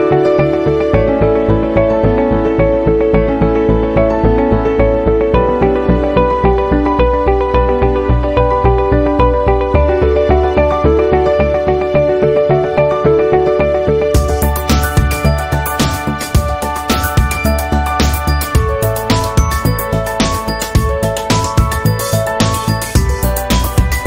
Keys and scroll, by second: 6.6 a, 11.1 p, 16.8 a.